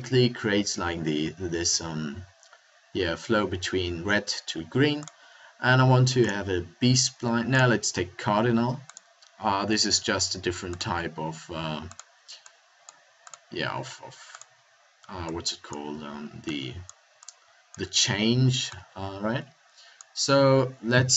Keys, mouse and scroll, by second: 9.3-10.7 middle drag.